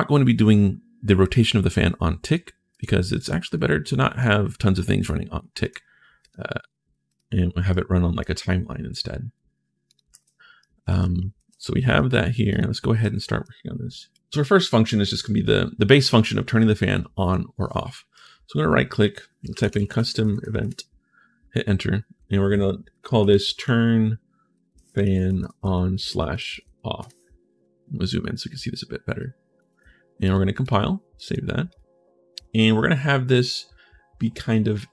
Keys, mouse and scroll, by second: 2.5 right click, 3.0 right click, 3.3 right click, 5.4 right click, 6.0 click, 6.8 click, 7.5 right click, 9.9 ctrl+shift+s, 10.4-11.8 typing, 10.4 right click, 12.3 right click, 12.8 right click, 13.9 right click, 17.9 right click, 18.9-20.7 typing, 23.0 t, 23.3 r, 24.3 space, 24.7 a, 26.3 f, 28.3 right click, 29.3 right click, 30.0 right click, 30.4 right click, 30.9 right click, 31.5 right click.